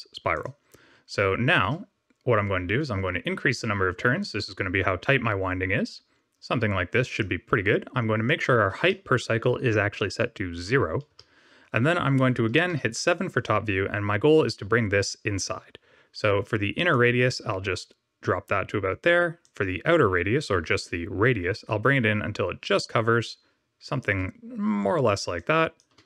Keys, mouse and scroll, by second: 3.5 click, 8.2 click, 12.6 KP_7, 16.8 shift+click, 19.3 shift+click, 25.3 shift+click.